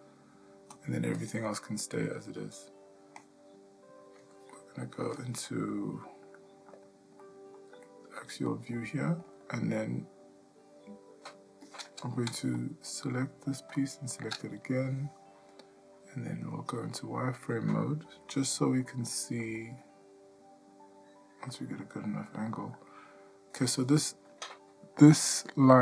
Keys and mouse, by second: 1.3-2.6 drag, 4.5 middle click, 5.2 shift+middle click, 5.7 ctrl+middle click, 6.4 shift+middle click, 7.2 middle click, 7.9-9.3 ctrl+middle drag, 13.1 shift+click, 16.5 click, 18.4 middle click, 19.2 shift+middle click, 19.6-22.6 middle drag, 22.9 ctrl+middle click.